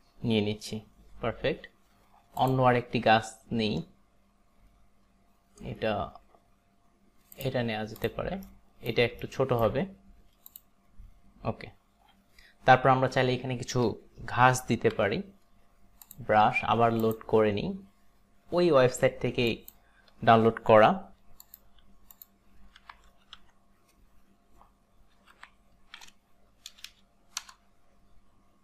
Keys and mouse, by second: 2.4 click, 8.0 click, 8.6 alt+right click, 9.4 alt+right click, 10.6 click, 15.0 b, 17.1 click, 19.5 click, 21.5 click, 22.1 click, 22.6-23.9 typing, 25.0-27.0 typing, 27.4 Return.